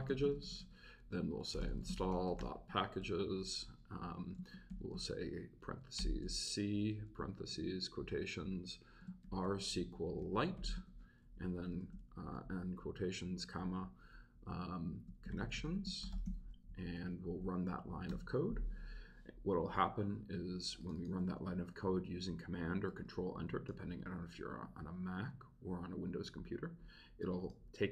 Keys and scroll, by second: 0.0-3.0 typing, 3.0 Return, 4.7 shift+c, 6.0 shift+9, 7.5 shift+', 9.0-11.8 typing, 13.4 shift+', 15.0-16.7 typing, 17.5 Right, 18.1 super+Return.